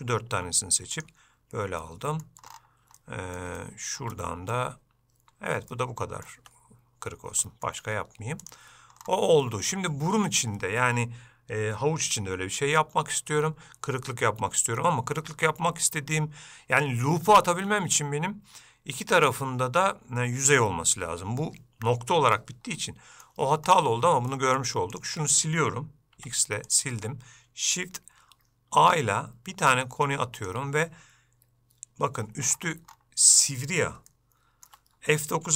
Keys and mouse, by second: 1.9 middle click, 3.1 middle click, 3.7 shift+middle click, 4.3 middle click, 5.8 middle click, 6.5 Tab, 7.6 shift+middle click, 8.5 click, 9.5 middle click, 22.9 middle click, 24.5 shift+middle click, 25.0-26.2 drag, 26.3 x, 28.9 shift+a, 34.2 shift+click.